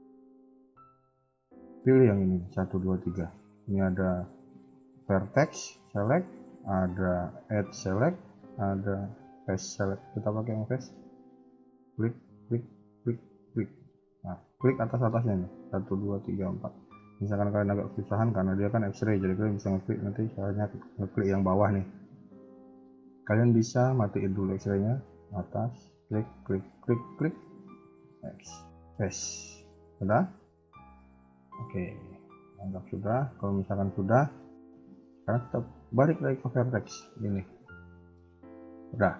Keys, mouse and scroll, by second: 0.2 a, 0.4 a, 9.9 click, 11.6 shift+click, 12.2 shift+click, 13.9 KP_1, 14.2 KP_3, 14.7 middle click, 18.9-25.5 click, 25.8-26.3 shift+click, 27.6 x, 29.6 middle click, 30.1 KP_1, 30.3 KP_3, 30.7 middle click, 31.6 KP_1, 31.8 KP_3, 32.7 Tab, 34.4 click, 37.0 click, 37.6 middle click.